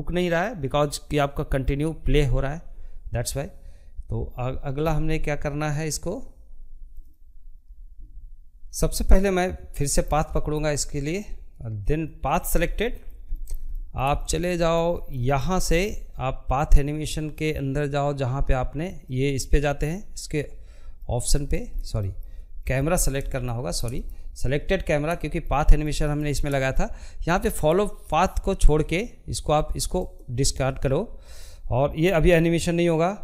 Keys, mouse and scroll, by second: 7.3 middle click, 8.1 scroll down 1, 8.4-10.1 middle drag, 10.1 click, 10.4 scroll down 2, 10.7-19.8 middle drag, 19.8-20.1 scroll down 1, 20.1 shift+middle click, 21.0-21.4 scroll down 2, 21.4 shift+middle click, 21.7 scroll up 1, 22.0 shift+middle click, 22.9 click, 23.2-28.0 shift+middle drag, 28.0-33.2 drag.